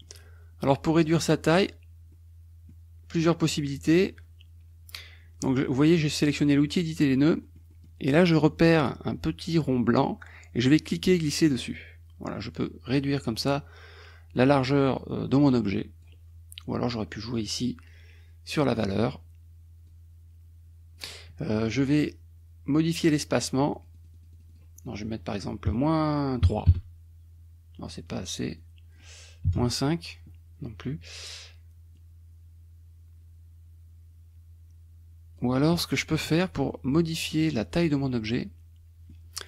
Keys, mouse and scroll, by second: 1.1 click, 2.1 middle click, 2.9-7.6 scroll up 1, 7.6 middle click, 10.7-13.7 drag, 14.9-16.2 drag, 19.9-21.2 drag, 23.8 click, 25.0 click, 25.7 KP_Subtract, 26.4 KP_3, 26.7 KP_Enter, 28.7 click, 29.6 KP_Enter, 32.0-35.6 drag, 36.0 KP_Subtract, 37.3 middle click, 38.2-39.3 middle drag.